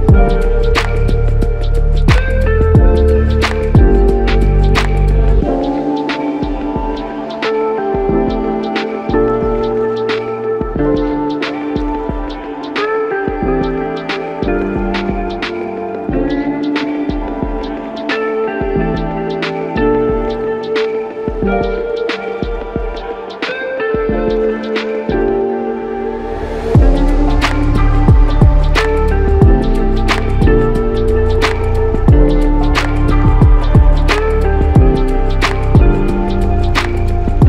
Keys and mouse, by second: 0.6 typing, 1.9 typing, 3.1 alt+shift+click, 4.2 alt+click, 8.4 double click, 13.7 alt+click, 15.5 r, 22.3 shift+click, 25.4 alt+click, 28.6 typing, 29.9 alt+click, 31.6 ctrl+alt+click, 32.5 alt+shift+click, 35.0 double click, 36.7 alt+click.